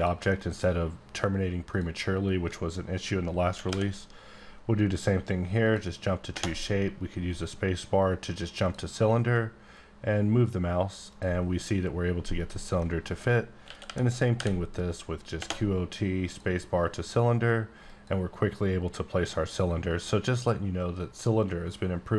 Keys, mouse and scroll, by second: 0.3 middle click, 0.7 scroll up 1, 1.7 click, 2.0-3.6 scroll up 3, 3.6 q, 5.0 typing, 5.6 click, 6.3 space, 8.6 click, 11.1 click, 12.4 click, 12.8 middle click, 13.6-14.4 typing, 16.3 click, 17.9 click.